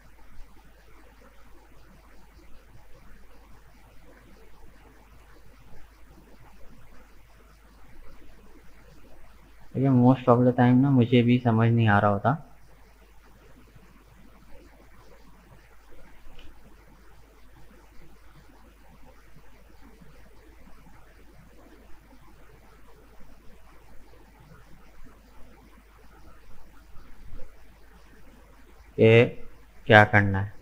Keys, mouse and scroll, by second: 1.7-2.2 scroll down 1, 2.2-3.5 middle drag, 3.5 Tab, 3.6 right click, 4.0-5.5 middle drag, 5.5 right click, 5.8 Tab, 6.3-9.4 middle drag, 10.8-13.0 middle drag, 13.0 click, 13.4-14.8 middle drag, 14.8 right click, 15.1 middle click, 16.1 g, 19.1 Tab, 19.2 right click, 19.6-22.6 middle drag, 25.7 right click, 26.0 Tab, 26.3-29.3 middle drag, 29.4-30.6 middle drag.